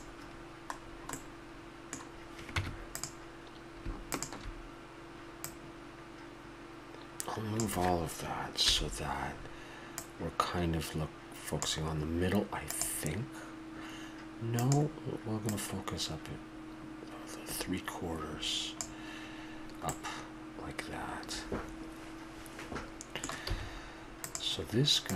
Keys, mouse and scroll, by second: 0.8-3.0 middle drag, 2.6 Tab, 4.1-7.4 drag, 8.6 KP_1, 9.9-11.9 drag, 15.5-17.4 drag, 19.8-21.9 middle drag, 22.8 middle click, 22.9 middle click, 23.1-24.3 middle drag, 23.5 a, 24.3-24.7 right drag.